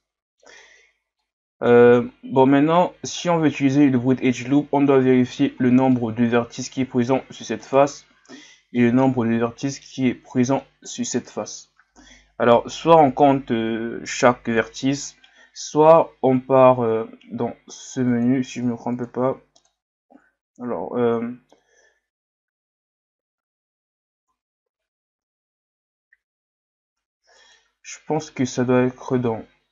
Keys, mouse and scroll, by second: 2.0 scroll up 3, 2.8-3.5 scroll up 2, 3.5-4.5 middle drag, 4.5 scroll down 2, 5.2-5.9 scroll down 2, 5.9-7.6 middle drag, 7.6 alt+right click, 8.8-10.0 middle drag, 10.0-10.6 scroll up 1, 10.6 middle click, 11.2 alt+right click, 18.1 click, 27.4-29.7 drag.